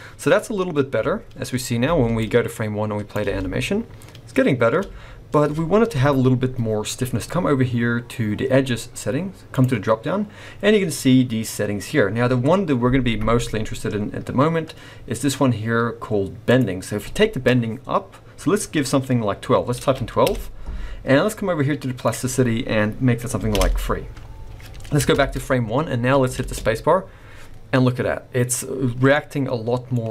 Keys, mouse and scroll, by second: 1.8 space, 2.2 click, 3.2 space, 4.8 space, 7.2 click, 9.5 click, 11.2-12.6 scroll down 1, 16.5 click, 22.0 click, 25.1 shift+Left, 26.4 space, 29.0 scroll down 1, 29.2 middle click.